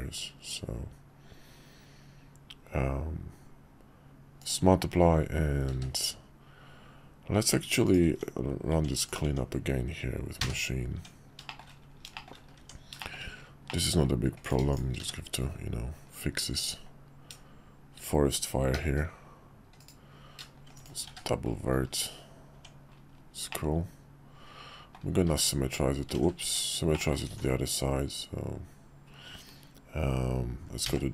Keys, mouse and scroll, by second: 5.7 q, 7.8 click, 8.0 Tab, 9.0 click, 10.4 3, 10.9 Tab, 11.4 shift+middle drag, 12.1 shift+middle click, 13.0 shift+middle click, 13.6 middle click, 14.4 click, 14.7 shift+click, 15.0 1, 18.7 g, 20.7 shift+click, 21.1 1, 22.5 Tab, 23.5-25.0 middle drag, 25.4 alt+x, 26.2 ctrl+z, 26.4 Tab, 26.9 middle drag, 27.3 alt+x.